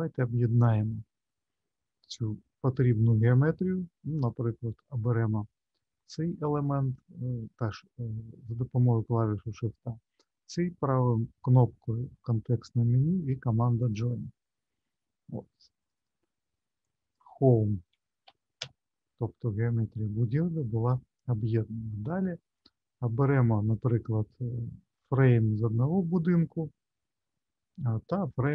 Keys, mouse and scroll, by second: 1.5-2.5 scroll up 1, 4.1 click, 6.5 shift+click, 10.6 right click, 15.8 click, 15.9 click, 21.9-23.6 scroll up 2, 23.7 click.